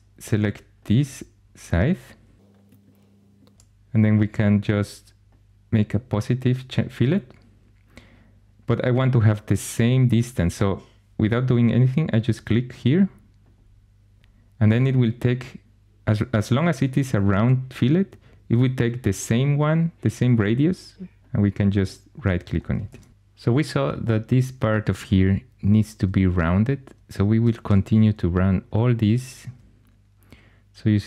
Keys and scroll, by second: 22.7 shift+super+e, 27.5 2.